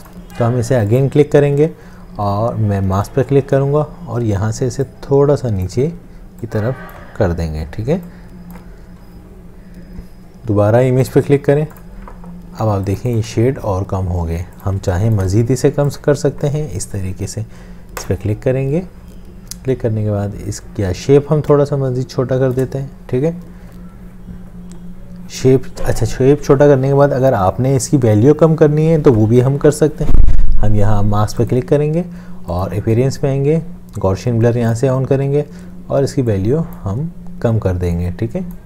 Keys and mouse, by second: 12.7 space, 14.3 space, 14.9 space, 21.6 alt+shift+click.